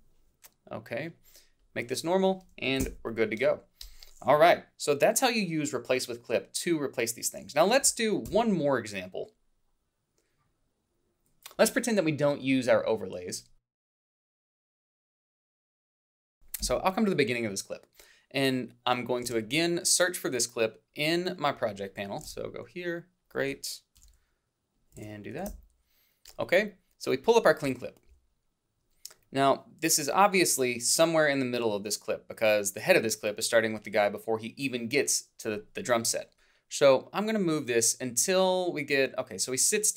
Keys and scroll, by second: 2.8 alt+Down, 11.8 =, 12.8 h, 16.3 a, 16.6 Up, 24.0 ctrl+c.